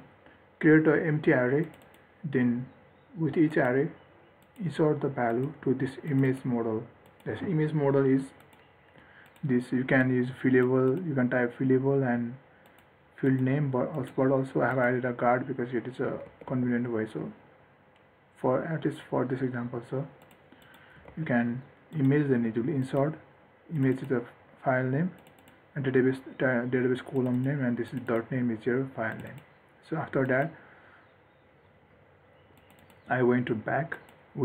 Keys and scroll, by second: 16.7 ctrl+s, 21.4 ctrl+s.